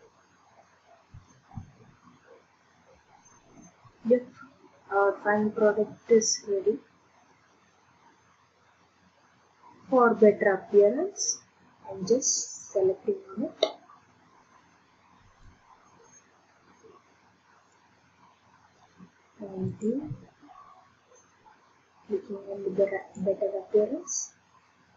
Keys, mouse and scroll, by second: 0.2-1.7 drag, 10.4 middle click, 11.3-13.8 middle drag, 13.8 scroll up 1, 13.8 scroll, 14.0-14.5 scroll up 1, 15.4 scroll up 2, 17.7 click, 18.8 scroll up 2, 19.8 click, 23.1 click.